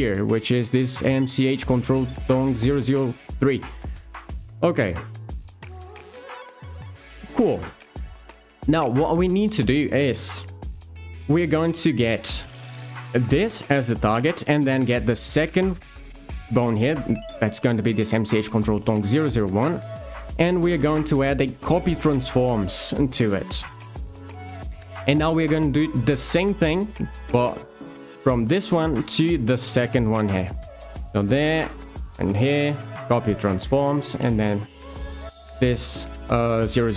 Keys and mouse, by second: 2.8 d, 8.4 Tab, 11.9 click, 20.6 d, 29.2 alt+shift+click, 32.3 d, 34.3 click, 35.0 alt+click.